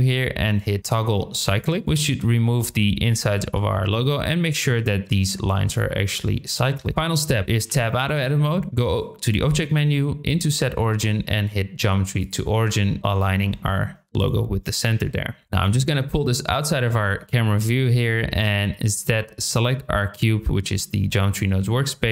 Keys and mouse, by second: 3.0 middle click, 6.9 Tab, 6.9-7.2 middle drag, 7.6 KP_7, 8.9-12.3 drag, 15.4 KP_0, 15.7 g, 16.5 drag, 19.4-22.0 drag.